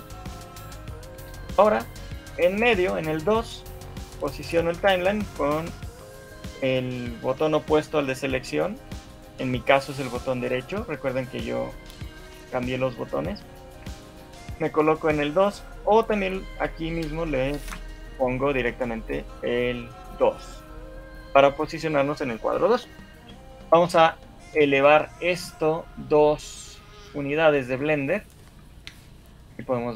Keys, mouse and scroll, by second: 0.2 shift+middle click, 0.5-0.8 scroll down 6, 0.9 shift+middle click, 1.5 scroll down 1, 1.9 shift+middle click, 3.6 shift+middle click, 4.7 right click, 11.0 shift+middle click, 12.7 shift+middle click, 13.3 shift+middle click, 13.7 scroll down 3, 14.1 shift+middle click, 18.6 click, 18.6 shift+middle click, 21.2 shift+middle click, 21.5-25.4 scroll up 1, 25.8-26.4 scroll up 3, 26.4 shift+middle click, 27.8-28.4 scroll down 6, 28.4 shift+middle click, 29.0 scroll down 1.